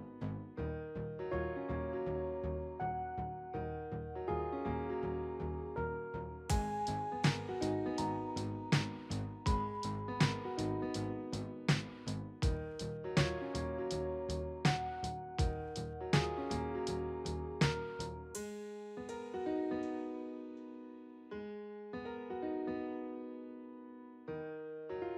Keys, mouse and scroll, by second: 2.8 right click, 15.0 right click, 22.6-23.5 scroll up 1, 23.5-25.1 scroll up 4.